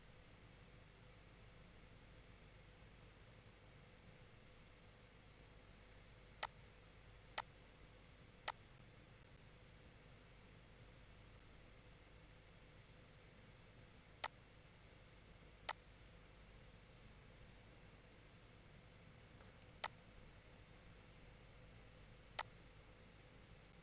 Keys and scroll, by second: 4.5 ctrl+z.